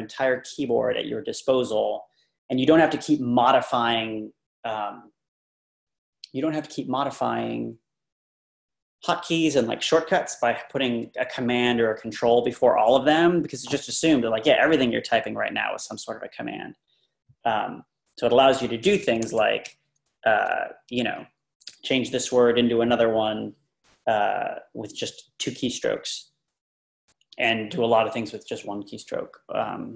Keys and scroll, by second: 19.1 Escape, 19.3 Down, 19.6-20.4 Left.